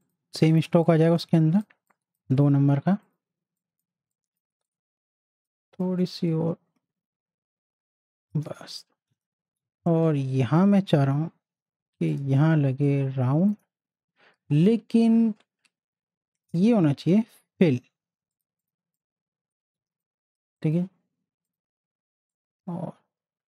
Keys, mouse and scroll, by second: 0.6 z, 0.8 click, 1.2 space, 1.3 click, 4.1 space, 4.1-8.5 drag, 9.6 z, 10.0 click, 11.0 l, 12.1-16.2 drag, 16.4 click, 18.8 space, 18.9 click, 19.3 space, 19.8 z, 20.0 click, 20.4 space, 20.6-23.5 drag.